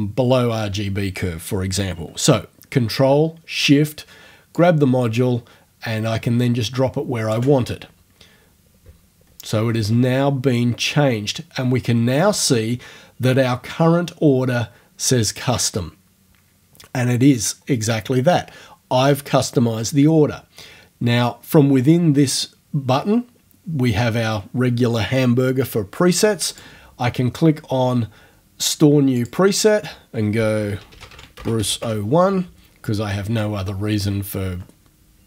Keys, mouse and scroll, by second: 4.5-7.5 ctrl+shift+drag, 26.5 click, 29.2 click, 30.3-32.3 typing.